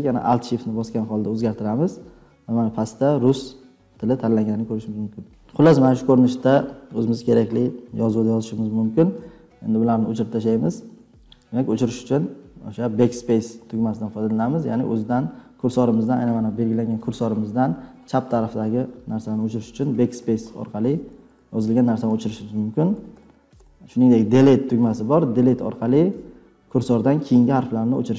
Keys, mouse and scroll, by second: 10.1-11.7 typing, 17.2 ctrl+scroll, 19.3-23.5 typing, 25.1 Left, 25.3 Left, 25.5 Left, 25.7 Left, 25.8 Left, 26.0 Left, 26.2 Left, 27.7 Delete, 27.9 Delete.